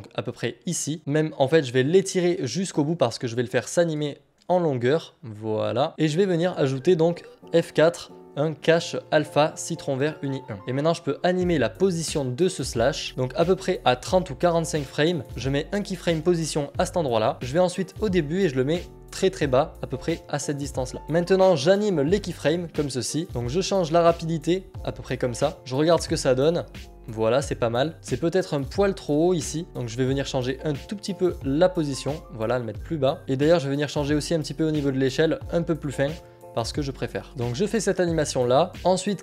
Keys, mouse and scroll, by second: 2.3 click, 6.1 click, 6.2 click, 10.3 click, 13.1 click, 15.9 click, 20.5 click, 24.0 click, 25.5 click, 27.9 click, 29.8 click, 33.1 click, 36.6 click, 37.8 Return, 37.8 b, 38.8 u, 38.9 click.